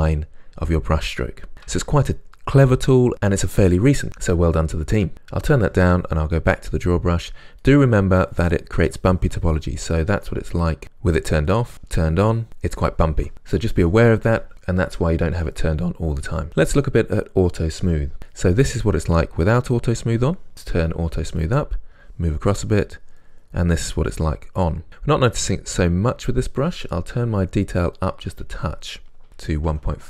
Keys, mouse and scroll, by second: 5.1-7.7 drag, 7.7-8.9 middle drag, 8.9-10.8 drag, 10.8 middle click, 11.7-16.5 drag, 16.5-19.0 middle drag, 19.0-21.5 drag, 21.5-22.7 middle drag, 22.7-24.2 drag, 24.2-28.5 middle drag, 28.5-30.0 drag.